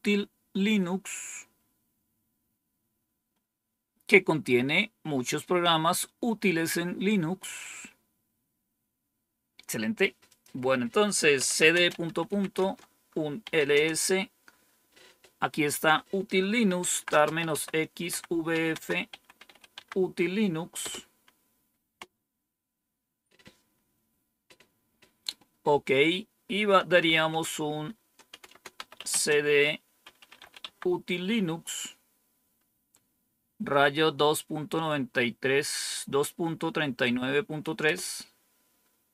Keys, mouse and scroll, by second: 10.2 click, 11.0-13.9 typing, 16.3-19.8 typing, 20.7 Return, 26.6-30.8 typing, 37.7 Return, 38.8-39.1 typing.